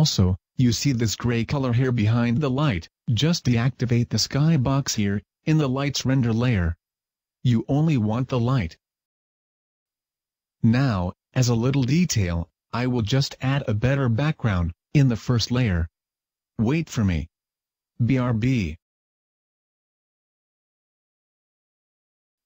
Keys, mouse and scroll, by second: 3.0 Escape, 4.3 click, 7.8 Escape, 9.7 click, 10.9 click, 12.4 click, 13.1 click, 13.7 click, 15.1 click, 17.9 click.